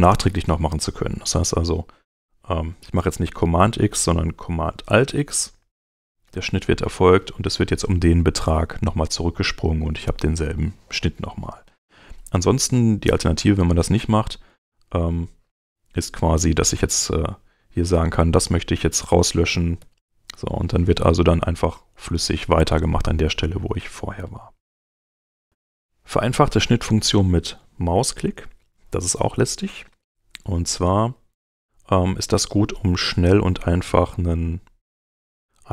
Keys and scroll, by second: 5.5 alt+super+x, 19.5 super+x, 29.8 super+Tab.